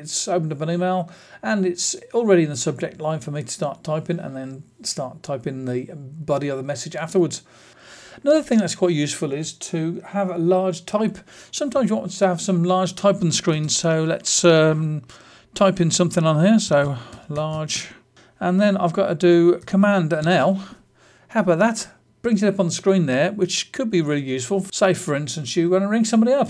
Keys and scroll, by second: 20.1 super+l, 24.6 Escape.